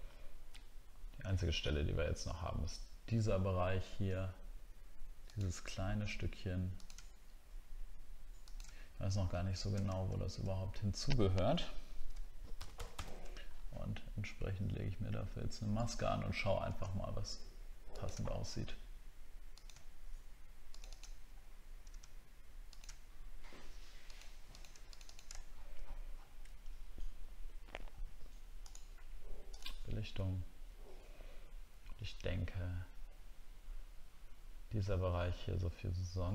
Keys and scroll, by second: 12.9 alt++, 25.5 alt+scroll down 1, 26.1 alt+scroll down 1.